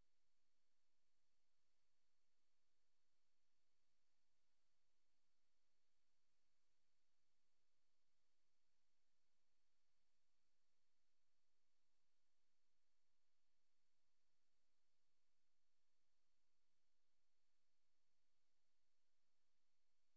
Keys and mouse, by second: 3.6 click, 4.1 click, 6.4 click, 7.1 click, 7.4 click, 8.3 click, 8.8 click, 9.2 click, 9.7 click, 12.1 Right, 15.1 click, 15.8 click, 19.8 click.